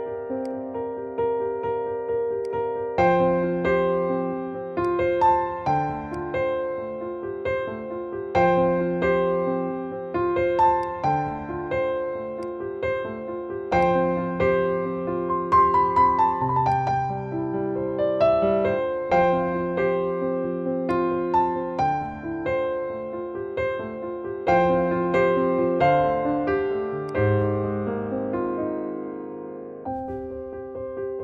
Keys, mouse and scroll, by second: 16.6-25.8 alt+drag, 27.0 click.